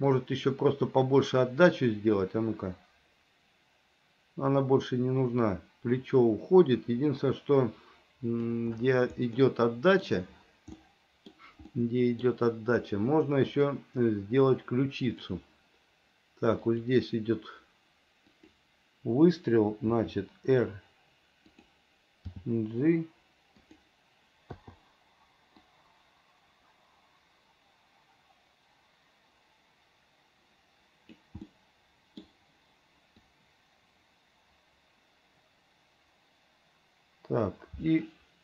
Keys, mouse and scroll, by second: 0.4-8.7 drag, 9.6 middle click, 11.0 middle click, 11.9 middle click, 13.7 click, 15.3 click, 16.9 click, 18.6 click, 20.1 r, 22.5 g, 24.8 i, 25.9-31.4 drag, 31.7 middle click, 33.5-38.4 drag.